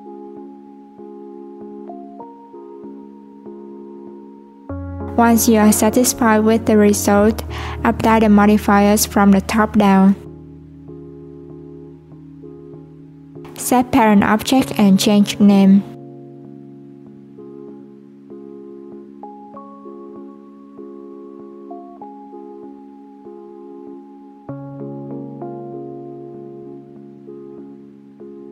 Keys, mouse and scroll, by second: 1.8 click, 5.3 click, 6.3 right click, 8.0 right click, 10.5-12.5 drag, 12.6-13.0 scroll down 1, 13.0 click, 13.3 click, 14.2 shift+click, 14.7 shift+click, 15.2 shift+click, 16.1 ctrl+p, 19.6 click, 19.7-20.8 drag, 20.8 f, 26.5-28.0 drag.